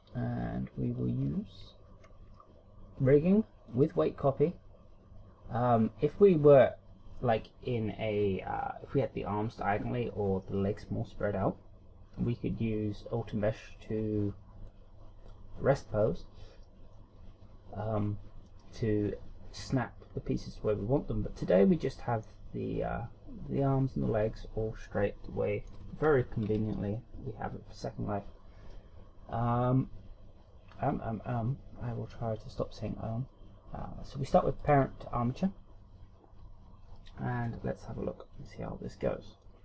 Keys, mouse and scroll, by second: 0.9-1.7 scroll down 5, 2.0 scroll up 1, 3.7 click, 14.6 click, 16.9 click, 22.3 middle click, 26.5 KP_1, 34.6 click, 38.4 click.